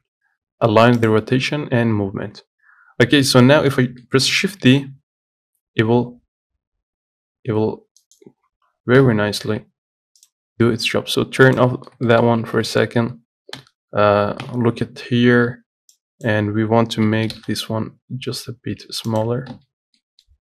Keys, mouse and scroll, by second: 3.5-4.9 middle drag, 4.9 shift+d, 9.2 Delete, 10.5 click, 11.7 click, 12.0 scroll up 2, 12.3 shift+middle click, 12.6 Tab, 12.9 middle click, 13.1-13.8 scroll up 2, 13.8 KP_1, 14.7 KP_Divide, 15.3-15.7 scroll down 1, 15.7 z, 16.5 click, 17.3 g, 19.5 Tab, 19.9 z, 20.2-20.4 middle drag.